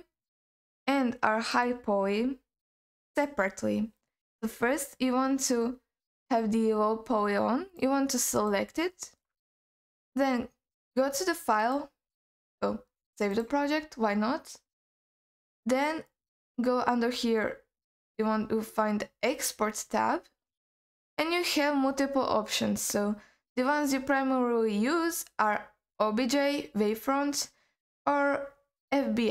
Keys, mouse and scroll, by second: 0.6 click, 1.5 click, 2.1-4.2 scroll up 3, 4.2-6.3 scroll up 3, 8.3-10.8 drag, 11.6-13.5 drag, 14.8-29.3 drag.